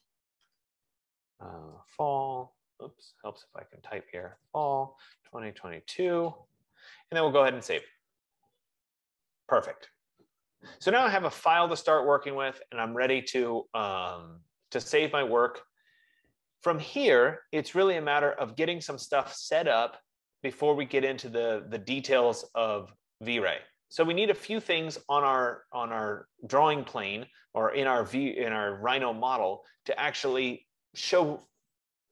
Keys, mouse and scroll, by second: 0.0-0.6 typing, 1.6-2.4 typing, 4.1-6.2 typing, 8.5-13.0 drag.